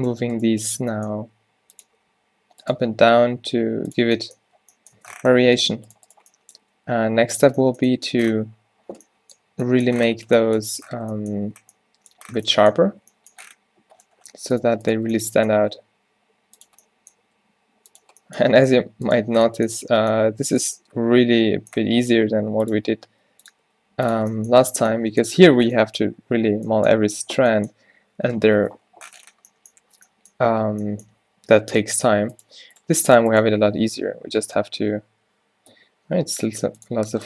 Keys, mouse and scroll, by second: 1.2 g, 2.8 g, 4.1 Tab, 5.0 Tab, 6.6 g, 7.5 Tab, 10.7 Tab, 15.8 r, 17.3 g, 20.1-21.3 drag, 22.4 g, 22.7-23.7 drag, 22.9 r, 23.7 g, 24.3 Tab, 30.6 Tab, 32.8 click, 35.8 o.